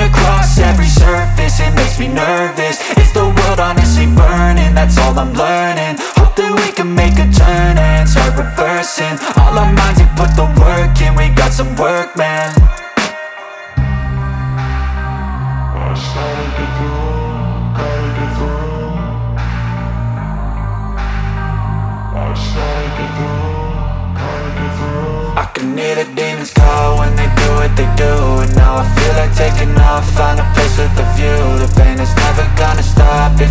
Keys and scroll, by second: 4.8 Delete, 8.4 F2, 18.2 space, 20.3 F3, 21.1 c, 21.4 Escape, 21.9 F2, 28.2 space, 30.5 F4.